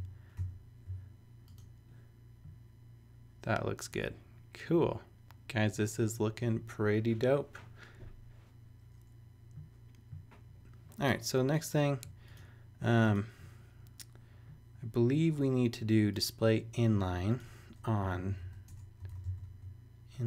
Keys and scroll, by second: 0.4 super+s, 17.8-20.2 typing.